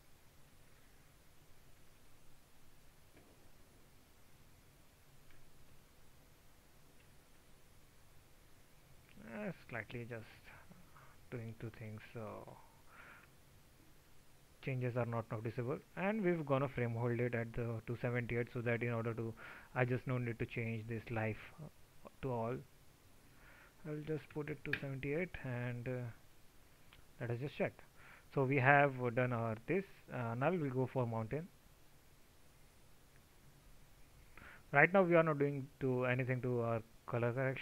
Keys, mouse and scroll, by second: 35.7-36.1 drag.